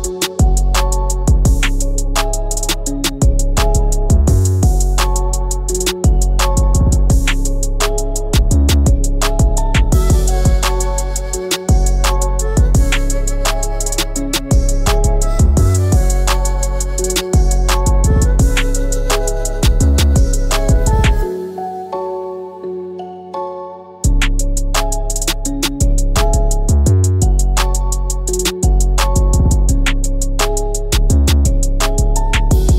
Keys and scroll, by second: 3.2 ctrl+z, 5.6 ctrl+z, 6.7 ctrl+c, 7.2 ctrl+b, 15.7 ctrl+x, 29.1 ctrl+f.